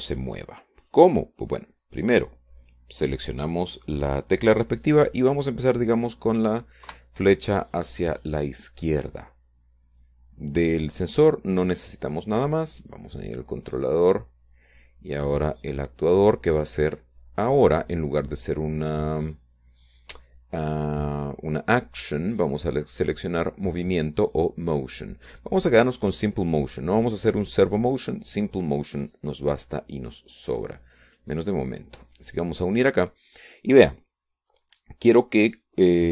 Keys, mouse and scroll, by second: 4.8 click, 9.7 BackSpace, 14.8 click, 15.6 click, 16.7-18.4 drag, 19.6 click, 26.6 click, 28.8-33.5 middle drag, 33.5-35.4 drag.